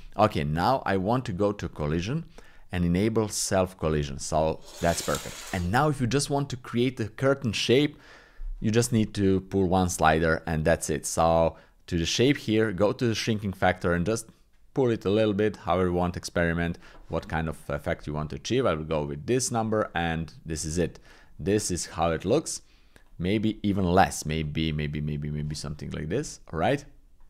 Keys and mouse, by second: 1.5 click, 3.3 click, 13.2-16.6 drag, 19.5 click, 20.7 shift+click, 21.7 click, 23.0 click, 23.4 click, 24.5 click, 26.2 click.